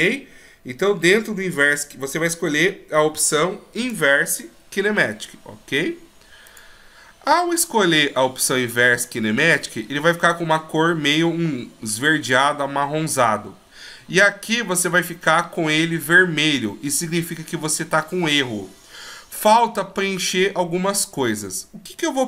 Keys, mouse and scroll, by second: 9.0 middle click.